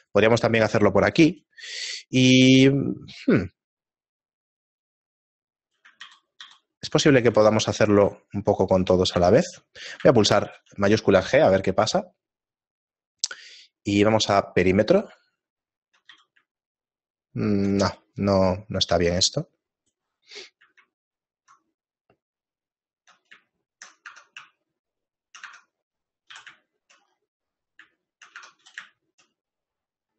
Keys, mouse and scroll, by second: 1.3 ctrl+b, 6.0 ctrl+z, 6.4 ctrl+z, 8.3 ctrl+z, 8.3 shift+middle click, 9.6 shift+middle click, 10.4 shift+g, 15.5 shift+middle click, 16.6 z, 18.2 shift+middle click, 18.2 z, 20.1 alt+right click, 21.6 shift+middle click, 23.9 shift+middle click, 24.3 Tab, 24.6 shift+middle click, 25.2 shift+middle click, 25.5 Tab, 25.9 middle click, 26.8 shift+middle click, 26.8 a, 29.0 shift+middle click, 29.0-30.1 scroll down 5, 29.0 a.